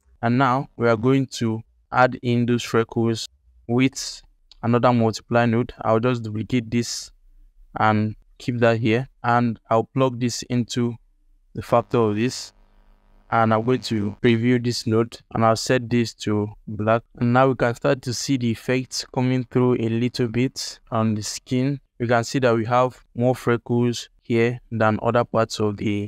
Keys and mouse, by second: 0.1 ctrl+alt+middle click, 0.5 alt+shift+middle click, 0.8 ctrl+alt+middle click, 1.3-1.8 drag, 2.0 alt+shift+middle click, 2.7 g, 3.2 click, 3.3 g, 3.9 click, 4.2 ctrl+alt+click, 4.6 drag, 5.0 shift+d, 8.3 alt+shift+click, 8.5 middle click, 8.8 ctrl+alt+middle click, 9.2 alt+shift+middle click, 10.4-11.5 drag, 14.0 ctrl+shift+click, 17.4-18.7 alt+middle drag.